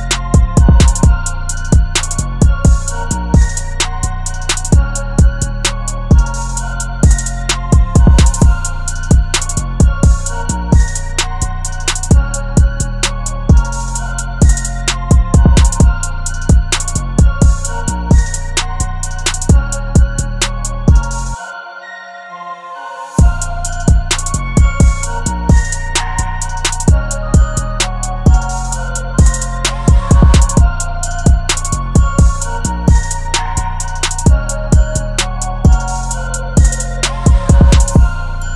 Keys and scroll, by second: 9.4 b, 10.8 ], 13.3-13.8 [, 14.9 ], 15.0 ], 15.2 ], 22.4 super+z, 28.7 [, 29.1 [, 33.1 ], 33.2 ], 33.4 ], 36.4 [, 36.8 [.